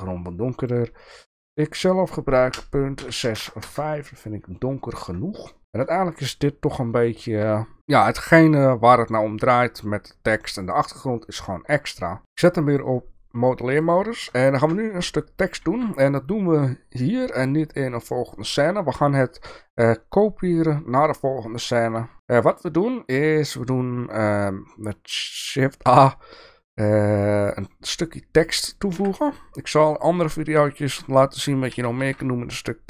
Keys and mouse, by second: 1.0-4.2 drag, 4.9 click, 5.6 shift+middle click, 12.7 click, 13.9 click, 14.5 shift+middle drag, 15.6 ctrl+a, 18.5 shift+a, 29.0 KP_7, 29.8 shift+middle click, 30.8 middle drag, 31.7 g.